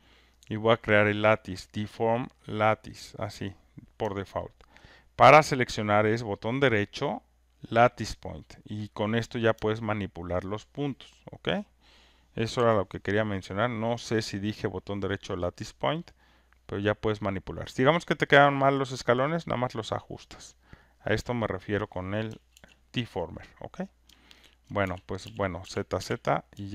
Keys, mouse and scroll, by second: 1.9 click, 3.1 click, 4.4 alt+right click, 4.7 alt+click, 8.2 right click, 8.2 click, 10.4 alt+click, 11.4 click, 16.1 click, 21.7 click, 22.6 ctrl+z, 23.6 click, 24.6 alt+click, 25.2-26.0 typing.